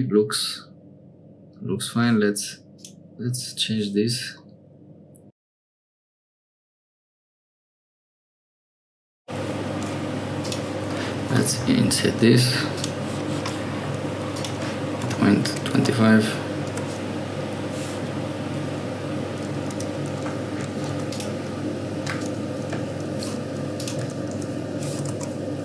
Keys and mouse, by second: 2.7 click, 4.3-6.4 middle drag, 6.4 click, 6.9 shift+click, 7.1 middle click, 8.0 middle click, 8.1 Tab, 8.4 3, 8.5 click, 8.9 o, 10.4 click, 11.5 i, 14.3-17.5 drag, 19.7 2, 20.9 3, 21.0 click, 23.7 click, 25.1 Tab.